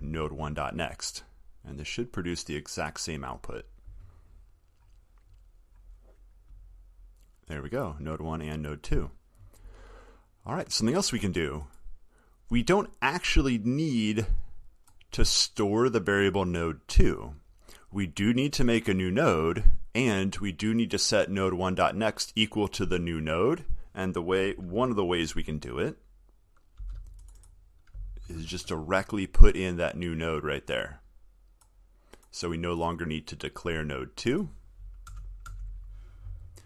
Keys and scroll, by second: 27.1 ctrl+x, 28.6 ctrl+v.